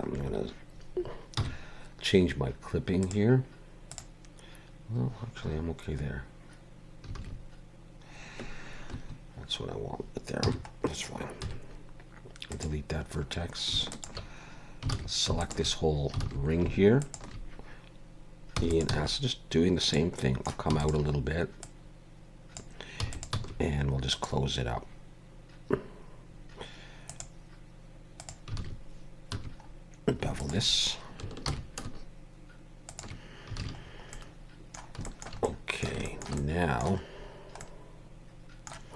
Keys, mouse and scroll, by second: 1.4 n, 3.0 click, 3.9 click, 10.4 n, 11.4 x, 13.2-13.5 scroll up 1, 13.9 alt+shift+click, 14.9 alt+a, 15.4 alt+shift+click, 16.2 alt+a, 17.0 alt+shift+click, 18.6 e, 18.9 s, 20.2 middle click, 20.7 e, 21.6 click, 23.0 e, 23.3 s, 27.1 click, 28.6 alt+a, 29.3 2, 29.6-30.1 scroll up 2, 30.4 alt+shift+click, 31.5 ctrl+b, 33.6 alt+a, 33.8-34.1 scroll down 3, 34.1 middle click, 35.0 shift+middle click, 35.4 middle click, 36.1 shift+middle click, 36.4 middle click, 37.2 scroll down 2, 37.6 middle click.